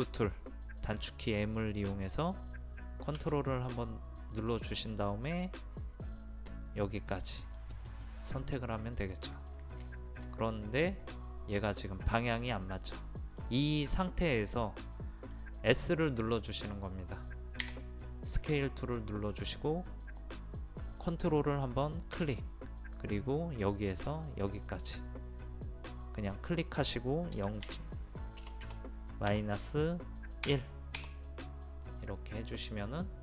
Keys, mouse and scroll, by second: 3.6-8.5 drag, 9.9-13.5 shift+middle drag, 17.7 s, 23.5 click, 27.4 KP_0, 27.7 KP_Decimal, 28.4 BackSpace, 30.5 KP_1, 31.9-33.2 middle drag.